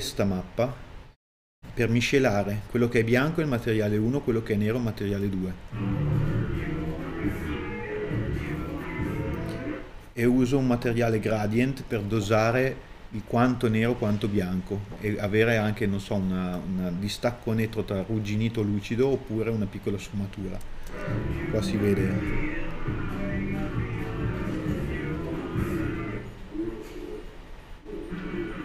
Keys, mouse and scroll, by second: 8.2 middle click, 8.3-8.8 scroll up 1, 8.8-10.7 drag, 20.8 middle click, 21.7 scroll up 2, 22.8 click, 23.6 ctrl+i, 24.2 KP_Enter, 25.2 ctrl+shift+click, 26.0 middle click, 26.4 scroll down 1, 26.6 middle click, 27.3 click, 27.7 click, 28.4 middle click.